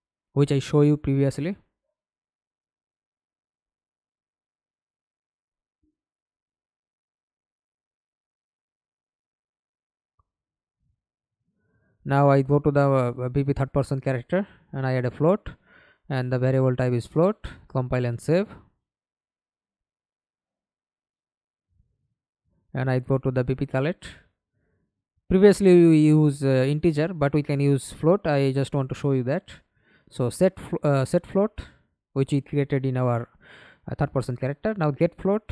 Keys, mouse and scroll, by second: 0.1 right click, 3.4 right click, 8.2 double click, 11.8-13.0 typing, 13.0 Return, 19.5 middle click, 19.9 ctrl+space, 22.2 double click, 23.4-24.0 scroll down 2, 25.8 right click, 26.4-28.2 scroll up 1, 27.9-30.5 typing, 30.7 Down, 30.8 Down, 30.9 Down, 33.0 Return, 33.2-35.3 typing, 35.4 Down.